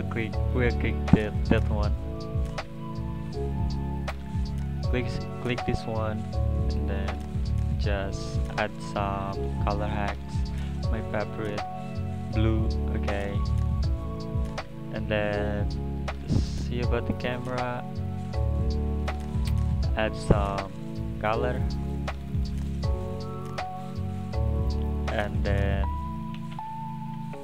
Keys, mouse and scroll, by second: 3.9 click, 6.9-12.7 drag, 15.8-16.2 scroll up 2, 16.2 click, 17.1-19.1 scroll down 2, 19.1-21.5 drag, 21.5 scroll down 6, 23.4 click, 24.7-25.1 drag, 25.1-25.5 middle drag, 26.0 click, 26.8 shift+a.